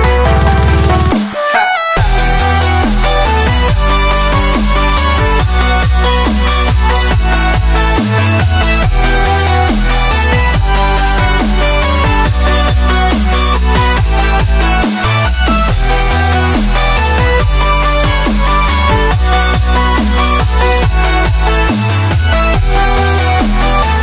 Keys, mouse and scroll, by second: 1.2-1.8 middle drag, 1.8 click, 2.4-4.0 drag, 4.2 KP_7, 4.7-5.6 drag, 5.6-6.4 middle drag, 6.4 scroll up 3, 6.6-7.4 middle drag, 7.4-9.0 right drag, 9.0-10.0 drag, 10.0 middle click, 10.6 click, 11.2 middle click, 11.7 click, 12.0-13.2 drag, 13.2 scroll down 1, 13.3 middle click, 14.1-15.2 right drag, 14.1 click, 15.2-15.8 middle drag, 15.8 right click, 15.8 click, 16.2-17.6 middle drag, 17.6 click, 18.1 middle click, 18.5 scroll down 1, 18.6-19.8 middle drag, 19.8-21.3 drag, 21.3-23.0 scroll down 5, 23.0-24.0 drag.